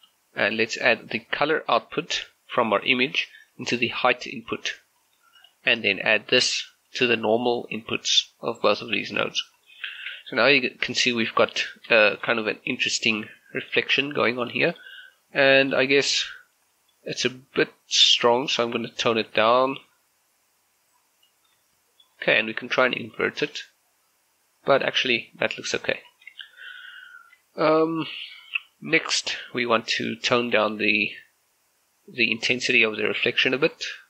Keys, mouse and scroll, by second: 5.2 g, 5.4-9.5 drag, 9.5 scroll down 1, 9.8 shift+middle click, 10.6-11.9 middle drag, 12.0 middle click, 12.4 shift+scroll up 1, 13.3-14.6 middle drag, 15.0-15.4 scroll up 1, 15.6 shift+middle click, 16.4-16.8 scroll up 1, 16.8 middle click, 17.1 scroll up 1, 18.5-21.8 drag, 21.8 shift+middle click, 23.5 click, 26.1 scroll down 1, 26.5 shift+middle click, 27.0 scroll up 1, 30.6-34.0 drag.